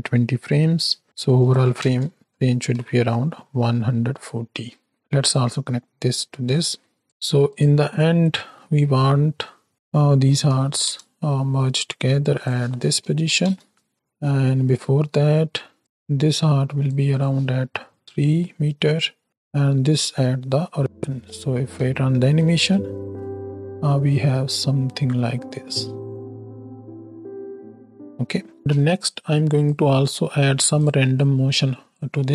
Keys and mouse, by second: 0.5-2.2 drag, 2.6 shift+Right, 2.7 shift+Left, 5.2-6.1 drag, 6.4 click, 7.5-9.4 drag, 9.7-10.9 drag, 12.3-13.4 drag, 13.9 shift+Left, 15.8-16.9 shift+drag, 17.0 click, 22.4 space, 24.7-25.6 drag, 27.9 space, 28.4 click, 28.6 space, 28.8 click, 29.6-30.6 drag, 31.2 click.